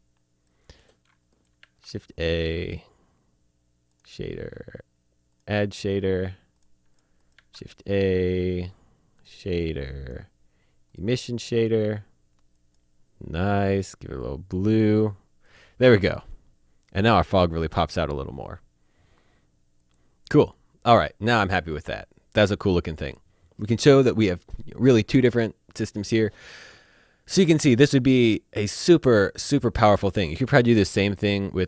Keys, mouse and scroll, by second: 1.2 a, 3.9 click, 7.3 a, 9.2 click, 12.6 click, 17.5 click, 19.8 click, 29.6 click, 30.4 a.